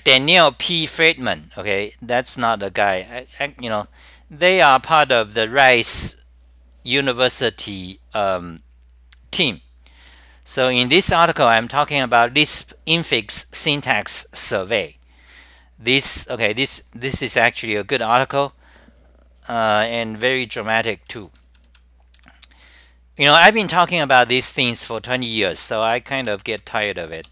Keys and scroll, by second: 4.0 Return, 4.8-5.6 typing, 8.5 p, 25.6-26.3 typing.